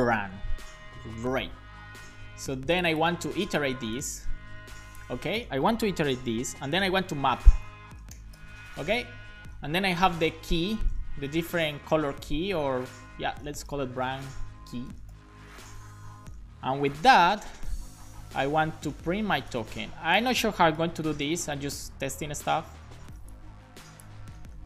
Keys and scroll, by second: 0.0-1.4 typing, 0.6 Right, 1.9 super+s, 3.2 super+c, 5.1 super+v, 6.7-8.3 typing, 9.0 Left, 10.0-11.5 typing, 11.9 Left, 12.2 Left, 12.8 Left, 14.9 BackSpace, 15.1 shift+j, 15.7 BackSpace, 16.3 shift+k, 16.9 Right, 17.1 Right, 17.2 Right, 17.5 Right, 20.8 BackSpace, 21.3 super+s, 24.2 super+x.